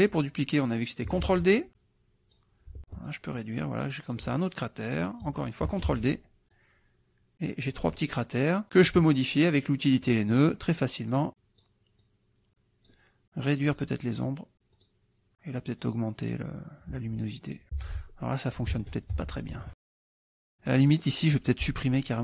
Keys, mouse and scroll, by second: 1.3 ctrl+d, 1.6 ctrl+click, 3.1-4.3 ctrl+drag, 4.7 ctrl+click, 5.9 ctrl+d, 6.6-7.9 drag, 8.1 click, 9.5 click, 10.1 click, 11.1 click, 12.1 click, 13.7 click, 14.3 click, 14.8 click, 15.9-17.9 drag, 17.8 F1, 18.7 ctrl+z, 19.1 ctrl+F1, 19.6 ctrl+KP_Subtract, 20.4 click, 20.8 click.